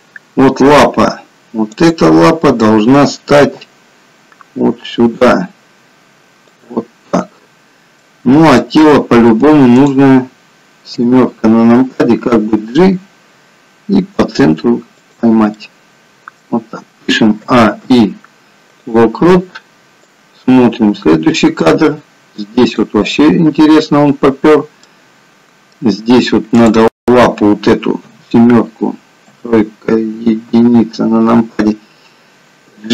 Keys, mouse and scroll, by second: 1.8 click, 3.7 g, 8.0 middle click, 9.9 click, 11.0 KP_7, 12.5 g, 15.8 middle click, 17.6 a, 18.1 i, 20.5 click, 24.9 middle click, 26.6 click, 27.9 KP_7, 29.1 KP_3, 30.4 KP_1.